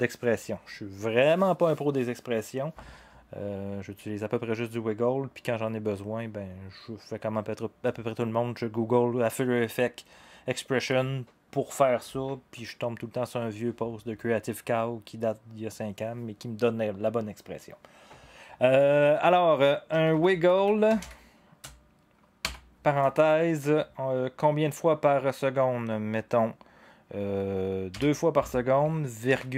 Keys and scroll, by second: 19.7-22.4 typing, 27.9 2, 29.2 ,.